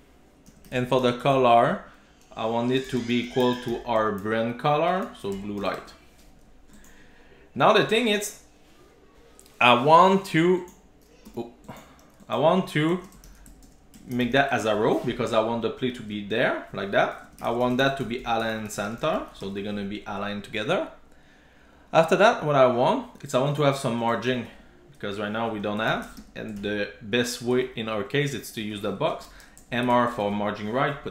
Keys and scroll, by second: 3.3 Return, 5.8 super+s, 10.7 alt+Return, 14.7 super+s, 19.4 super+s, 24.5 super+x, 26.3 Tab, 26.6 super+v, 27.7 super+s.